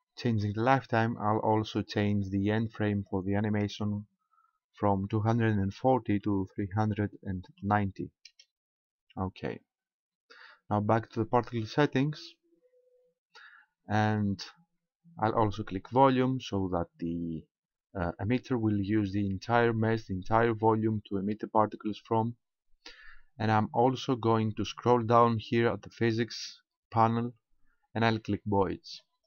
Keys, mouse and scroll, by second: 1.6 click, 2.9 click, 12.0 click, 15.7 click, 22.6-23.8 scroll down 2, 23.8-25.8 scroll down 5, 25.8-26.4 scroll down 1, 29.0 click.